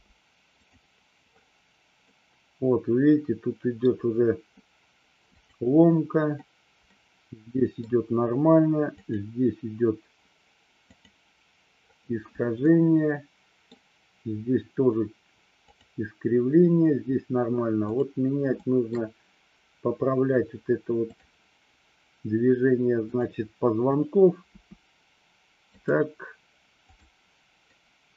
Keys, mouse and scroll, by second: 0.0 space, 0.6 click, 2.1-4.0 middle drag, 5.4 click, 6.9-7.9 middle drag, 9.0 click, 11.0 click, 12.7-13.7 middle drag, 15.7 click, 18.0 click, 18.6-19.1 shift+middle drag, 21.1 click, 24.6 r, 26.9 click, 27.7-28.1 middle drag.